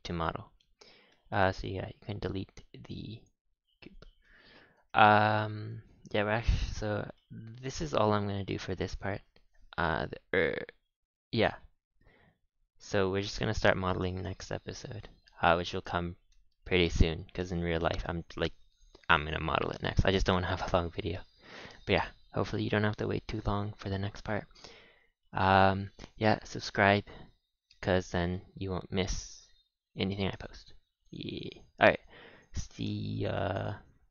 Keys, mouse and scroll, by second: 1.1 KP_1, 1.9-2.7 scroll up 6, 2.7 click, 3.1 click, 3.5 x, 4.2-4.6 middle drag, 4.6-5.1 scroll down 4, 6.3 KP_5, 7.1-10.2 middle drag, 10.9-11.5 scroll up 1, 11.5-14.0 middle drag, 14.0 ctrl+s, 14.3-14.8 scroll down 4, 14.8-17.8 middle drag, 19.9 scroll up 6, 20.2-20.6 shift+middle drag, 20.6-21.0 scroll up 3, 21.0 ctrl+s, 21.4-24.4 shift+middle drag, 28.0-28.3 scroll down 3, 28.3-31.3 middle drag, 32.2-32.6 scroll up 5, 32.6-33.1 middle drag, 33.1-34.1 scroll down 4.